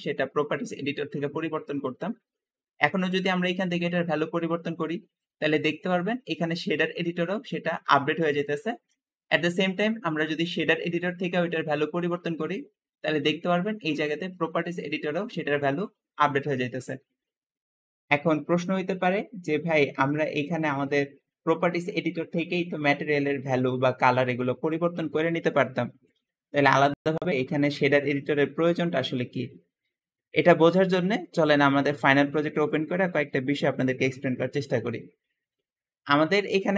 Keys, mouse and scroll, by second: 2.7 click, 6.0 click, 6.6 click, 7.3 click, 7.7 click, 8.8 Escape, 9.3 click, 12.9 `, 13.1-14.1 drag, 14.5 click, 15.2 click, 18.5-19.0 scroll down 2, 19.0-19.9 scroll up 2, 26.5-27.3 scroll down 3, 28.1-29.5 middle drag.